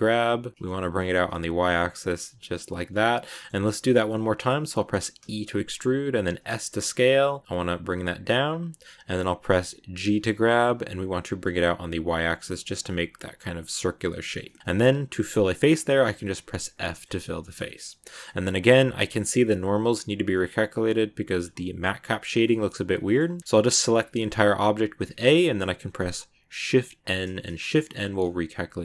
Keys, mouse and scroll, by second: 3.2-5.1 middle drag, 5.1 e, 14.1 shift+middle click, 14.7 scroll down 1, 16.5 f, 16.8-21.3 shift+middle drag, 21.3-22.0 scroll up 1, 22.0 scroll up 1, 22.1 scroll down 1, 22.3-23.4 middle drag, 23.4 scroll up 1, 23.4 a, 24.2 scroll down 2, 24.4 a, 24.6 a, 25.5-27.0 middle drag, 27.0 shift+n, 27.5 middle click, 27.9 scroll up 1, 28.1-28.8 middle drag.